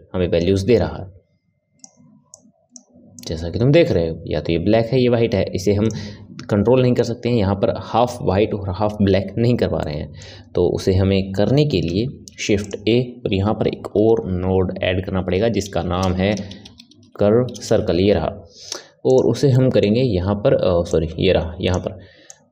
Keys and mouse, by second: 9.8-12.0 middle drag, 12.0 shift+a, 19.5-20.9 middle drag, 20.9 click, 22.3 click.